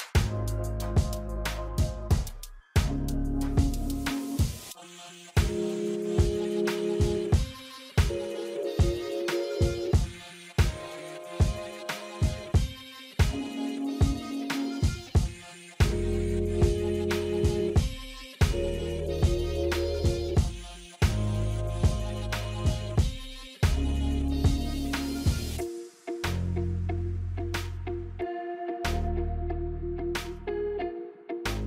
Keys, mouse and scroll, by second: 7.4 F9, 9.5-13.6 drag, 13.6-14.3 scroll up 1, 15.6-19.9 drag, 19.9 scroll down 1, 21.1 click, 22.5 right click, 23.5 click, 25.1 alt+scroll up 1, 25.8 space, 26.1-31.3 drag.